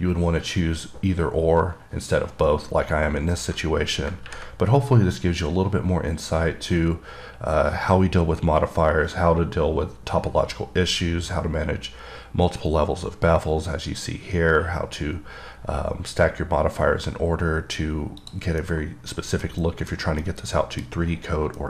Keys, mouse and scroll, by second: 18.5 click, 19.0 middle click, 19.4 scroll down 1, 19.7 middle click, 20.2 scroll down 1, 20.5-21.6 middle drag.